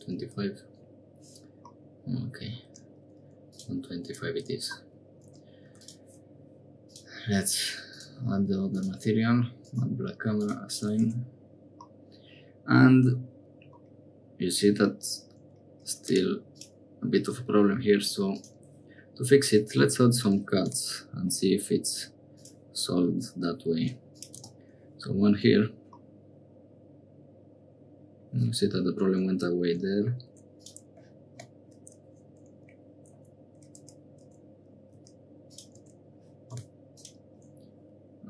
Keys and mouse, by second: 1.7 middle click, 3.5 click, 4.1 Tab, 4.7 middle click, 5.2 Tab, 5.6 3, 5.7 click, 6.8 click, 7.9 click, 8.7-9.8 drag, 10.3 click, 11.1 Tab, 11.8-13.1 drag, 13.8-14.8 drag, 15.4 Tab, 15.9 3, 16.0 click, 16.5 click, 18.3 click, 25.5 Tab, 26.0-28.1 middle drag, 29.2 Tab, 30.3 1, 30.5 click, 33.0 Escape, 33.8 Tab, 34.2 Tab, 34.9 a, 35.4 click, 35.7 1, 36.5 k.